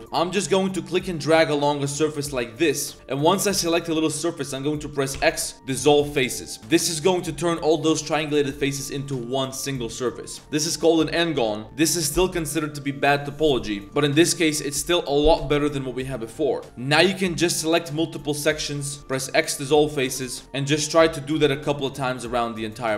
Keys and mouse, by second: 0.0 n, 0.0 c, 5.1 x, 16.6 a, 16.6 c, 19.0 x, 20.1 click, 20.4 a, 20.4 c, 21.0 shift+click, 21.4 x, 22.5 shift+click, 22.7 a, 22.8 a.